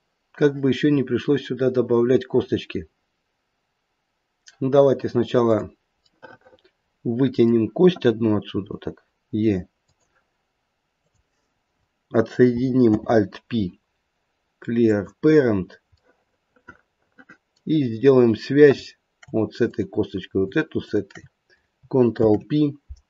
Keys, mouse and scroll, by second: 5.3 click, 6.0 middle click, 8.5 e, 10.9 click, 12.8 alt+p, 15.5-16.0 scroll up 2, 16.0 middle click, 17.1 middle click, 19.7 click, 20.8 shift+click, 22.1 ctrl+p.